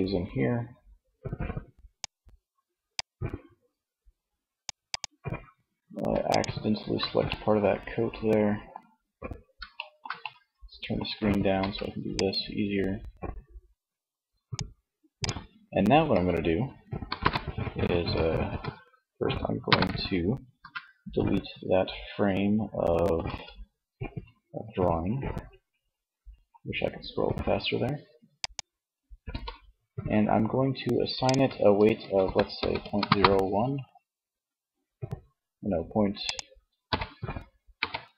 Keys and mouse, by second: 10.7 c, 14.9 z, 16.1 KP_1, 17.8 z, 18.6 ctrl+KP_1, 22.1 n, 27.4 click, 28.3 n, 30.4-32.0 drag, 35.3-37.0 drag.